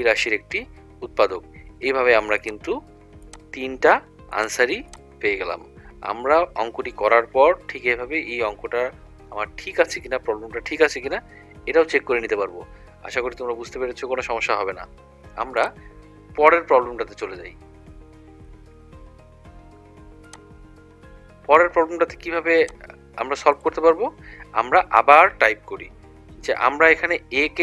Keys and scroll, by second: 2.6 Up, 3.3 Up, 4.4 Down, 5.0 Down, 23.6 1.